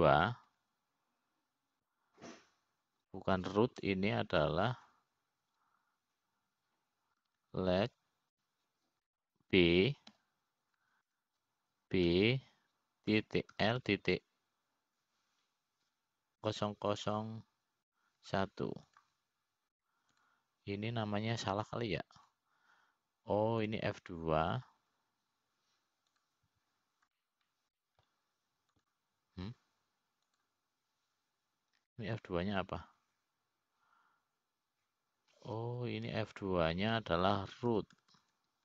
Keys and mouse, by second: 3.1 F2, 19.2 KP_0, 22.8-24.7 drag, 24.9-26.7 drag, 26.8 F2, 29.8 middle click, 31.5-33.3 drag, 35.3 F2.